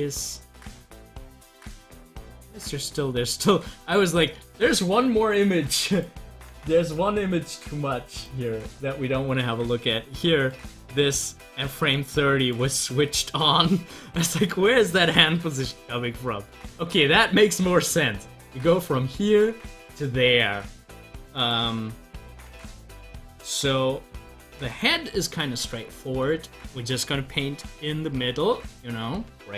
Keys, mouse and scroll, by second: 0.6 click, 3.3 click, 16.3 scroll up 1, 26.4 scroll up 1.